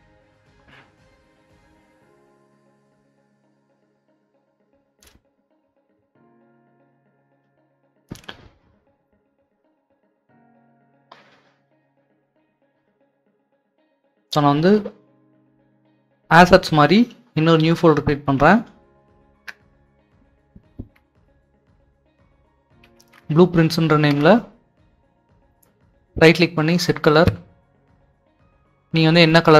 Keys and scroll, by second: 19.2-23.0 typing, 24.1 Return.